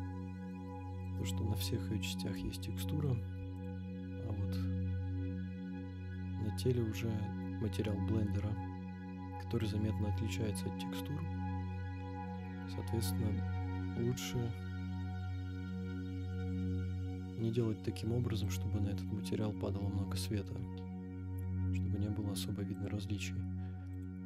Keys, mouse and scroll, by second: 1.0 click, 1.8-2.4 scroll down 5, 2.6-3.0 shift+middle drag, 3.5 click, 4.0-4.4 scroll up 5, 5.1 scroll down 1, 5.2-6.1 scroll down 4, 6.1-8.3 middle drag, 9.4-9.8 scroll up 4, 11.4-12.3 scroll down 5, 12.7-14.1 scroll down 1, 14.1 KP_0, 16.8-17.6 middle drag, 18.4 click, 19.0 middle click, 20.6 KP_0, 22.7 click, 23.9 click.